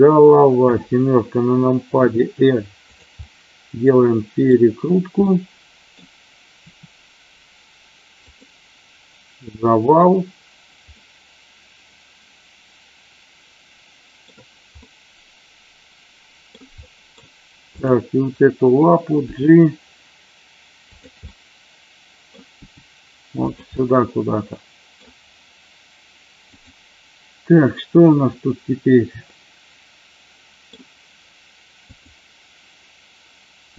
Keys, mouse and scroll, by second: 1.9 r, 2.8 click, 3.0-4.3 middle drag, 5.2 middle click, 6.5 r, 10.9-14.2 middle drag, 14.7-16.5 middle drag, 16.7-17.2 middle drag, 17.7 click, 19.3 g, 20.8 click, 21.2 middle click, 22.6 g, 23.5 click, 23.7-25.0 middle drag, 25.0 scroll down 1, 26.6 click, 29.3-30.7 middle drag, 31.8 click.